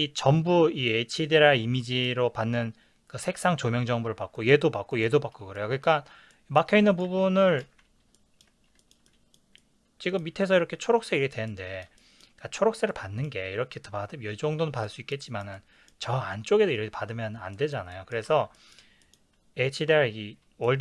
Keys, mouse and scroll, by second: 4.9 click, 5.6-6.9 middle drag, 6.9 click, 7.1 g, 7.6 click, 7.7 ctrl+z, 8.1-11.8 ctrl+middle drag, 12.1-18.3 middle drag, 18.3 ctrl+s.